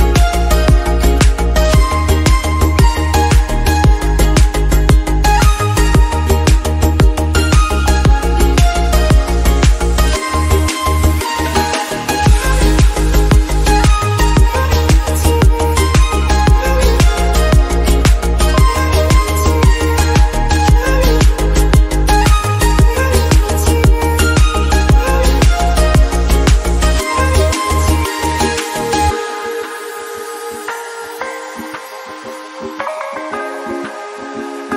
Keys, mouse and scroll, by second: 0.0 click, 0.2 scroll down 2, 0.5 shift+middle click, 0.6-1.5 scroll up 2, 1.5-3.3 drag, 4.9 click, 9.0 click, 9.5 middle click, 10.1 s, 10.8 middle click, 11.5 KP_7, 12.0 g, 14.4 click, 14.8 middle click, 15.1 KP_3, 16.3 r, 17.6 g, 19.3 middle click, 20.0 scroll down 2, 20.1 KP_7, 20.6 shift+middle click, 21.2 shift+a, 21.6 middle click, 21.9 middle click, 22.5 scroll up 1, 22.6 middle click, 22.9 click, 23.5 shift+middle click, 23.8 scroll up 3, 24.1 middle click, 24.7-25.2 scroll up 1, 25.2 click, 26.0 scroll down 1, 26.1 middle click, 26.5 click, 27.3 scroll down 2, 27.3-28.6 middle drag, 28.6-29.8 drag, 29.9 click, 30.5 KP_0, 30.9 KP_0, 31.5 click, 32.1 KP_0, 33.1 scroll down 3, 33.4 middle click, 33.5-34.2 scroll up 5, 34.2 s.